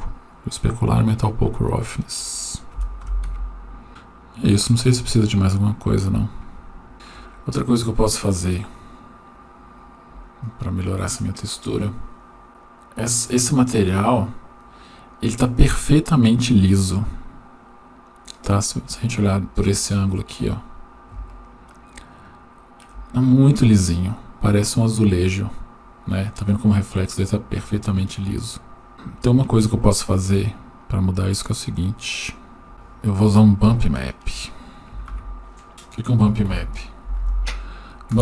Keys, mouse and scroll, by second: 1.0 click, 2.0-3.3 drag, 4.0-5.2 drag, 6.9 shift+middle click, 8.2-9.0 right drag, 13.0-13.3 scroll up 1, 13.5-15.5 scroll up 3, 15.5-18.5 middle drag, 18.8-19.2 scroll up 1, 21.1 scroll up 7, 21.5-22.6 shift+middle drag, 28.9 shift+middle click, 28.9-29.6 scroll down 2, 30.6 click, 30.8-31.4 drag, 32.1 click, 32.4 click, 33.7 shift+middle click, 35.1 shift+a.